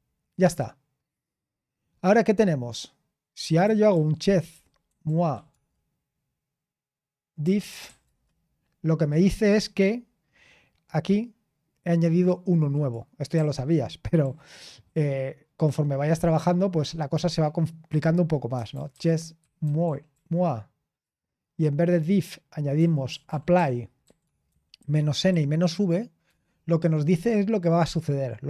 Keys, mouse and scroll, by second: 3.1-5.8 typing, 7.1-8.3 typing, 11.0-13.3 drag, 13.3 typing, 18.3-21.2 typing, 22.5-26.2 typing.